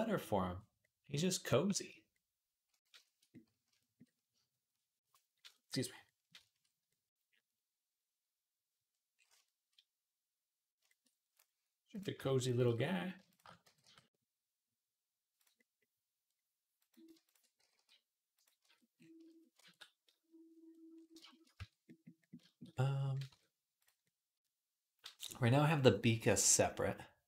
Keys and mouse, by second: 0.3 Tab, 3.0-9.0 middle drag, 9.1-11.8 shift+middle drag, 11.8 click, 12.0 shift+middle click, 12.2 click, 12.2 shift+a, 12.5 alt+middle click, 13.1 alt+shift+click, 13.2-16.7 alt+middle drag, 13.5 g, 16.7 click, 16.8 alt+shift+middle click, 17.0 alt+shift+click, 17.1-27.2 middle drag, 17.1 shift+a, 17.4 g, 18.5 Tab, 19.9 ctrl+s, 21.4 Tab, 23.1 Tab, 23.6 click.